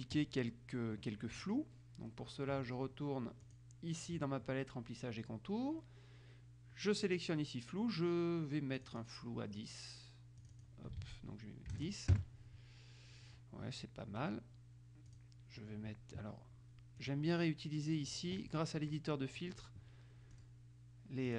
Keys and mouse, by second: 3.6 click, 8.9 click, 10.6 click, 11.1 ctrl+a, 12.0 KP_0, 12.3 KP_Enter, 15.3 click, 17.1 click, 18.2 click, 20.5 click.